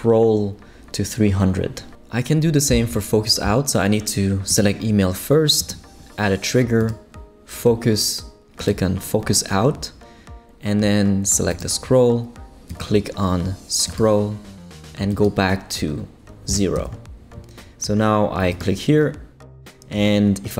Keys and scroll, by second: 16.5 0, 16.8 Return.